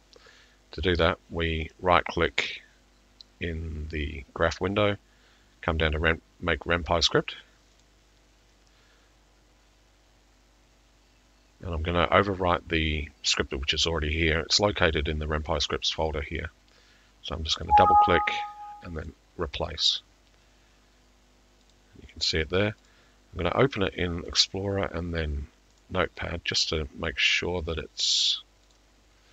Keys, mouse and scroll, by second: 1.1 click, 1.7 click, 7.8 click, 17.6 click, 17.8 click, 19.1 click, 21.7 click, 24.4 right click, 25.8 click, 28.8 right click.